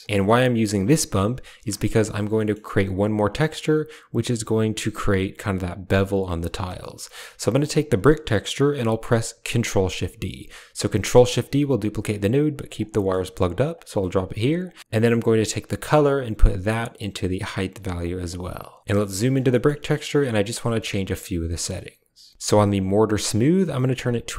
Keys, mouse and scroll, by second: 0.2 click, 1.6 shift+drag, 2.3 shift+click, 6.6 middle click, 7.4 click, 10.7 ctrl+shift+d, 12.8 middle click, 13.6 click, 14.5 click, 15.7-17.4 drag, 17.9 click, 18.8 middle click, 19.0 middle click, 19.3 middle click, 19.7 middle click, 20.5 middle click, 22.3 click.